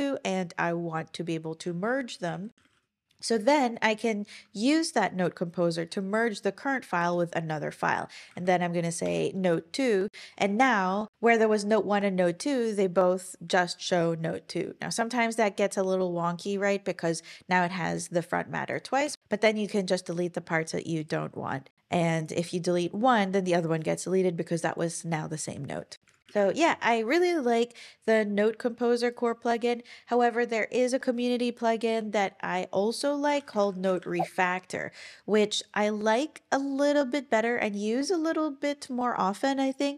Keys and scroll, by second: 2.3 super+p, 2.3-3.2 typing, 7.0 Return, 8.3 Page_Down, 9.0 Return, 19.0 BackSpace, 19.2 shift+Page_Down, 19.4 shift+Down, 26.1 super+w, 26.3 super+,, 33.0-34.6 typing.